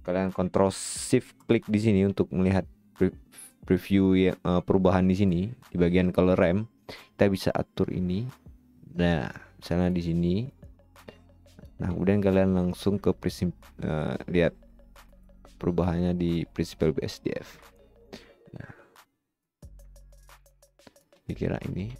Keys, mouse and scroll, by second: 0.4-1.1 right drag.